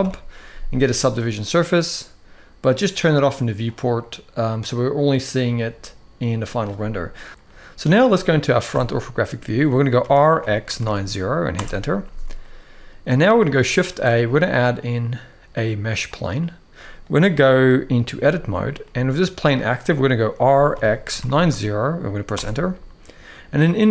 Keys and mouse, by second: 3.4 click, 6.1 middle click, 7.3-7.6 middle drag, 7.3 KP_7, 8.4 KP_1, 9.8 r, 13.6 shift+a, 17.9 Tab, 18.6 middle click, 20.0 r.